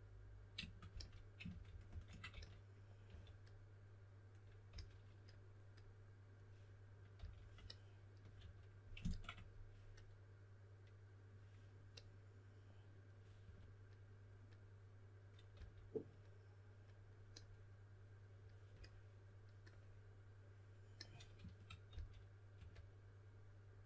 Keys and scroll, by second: 0.8-3.5 typing, 4.6 typing, 7.1 typing, 8.3 2, 13.4 2, 15.2-16.0 typing, 21.8-23.0 typing.